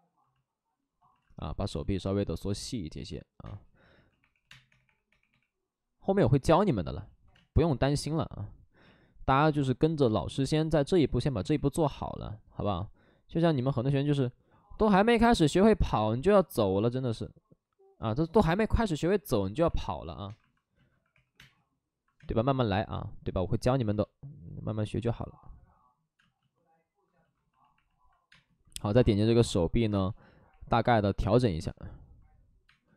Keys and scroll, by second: 1.1 alt+s, 3.4-4.6 typing, 6.8 alt+s, 7.3 space, 8.7 ctrl+z, 11.3 ctrl+z, 11.3 w, 17.1 ctrl+z, 18.4 alt+s, 18.7 2, 20.8 2, 21.0 2, 21.2 2, 21.3 space, 26.0 space, 26.1 space, 27.9 space, 28.2 space, 28.9 space, 30.0 space, 31.4 space, 32.6 space.